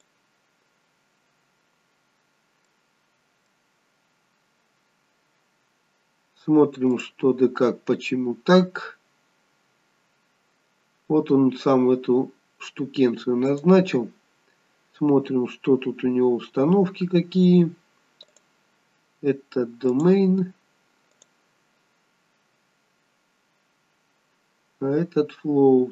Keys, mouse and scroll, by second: 0.9 click, 0.9-2.7 scroll down 2, 2.7 middle click, 6.3-6.9 scroll up 2, 6.9 click, 11.8-13.5 scroll down 1, 13.5 click, 14.9 scroll down 2, 15.7-16.4 scroll up 2, 18.3 click, 21.1 click, 23.4-23.7 scroll up 1, 23.8 scroll down 4, 24.7-25.9 scroll down 3.